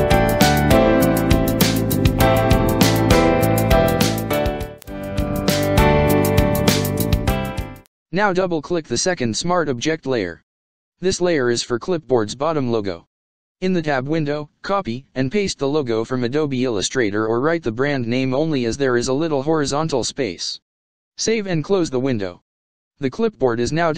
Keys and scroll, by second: 14.4 ctrl+c, 15.2 ctrl+v, 19.8 ctrl+s, 22.4 ctrl+-.